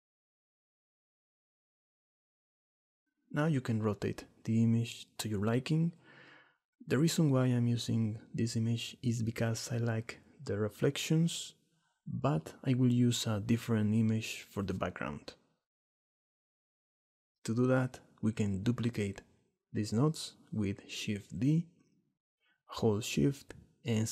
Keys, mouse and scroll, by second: 4.3 click, 4.9-7.5 middle drag, 12.9 middle click, 21.3 shift+d.